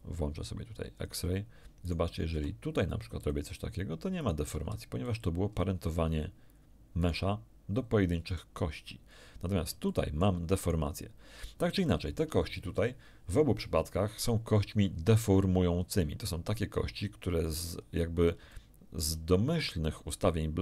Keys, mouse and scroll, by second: 0.9 click, 1.8 right click, 2.3 r, 3.2 click, 4.2 right click, 4.5 r, 5.0 click, 5.4 middle click, 5.4-5.8 scroll up 1, 7.0 right click, 8.2 right click, 9.4 scroll down 1, 9.8 shift+middle click, 10.6 shift+right click, 11.7 shift+scroll down 1, 11.8 shift+middle click, 17.8-18.2 scroll up 1, 18.4 shift+middle click.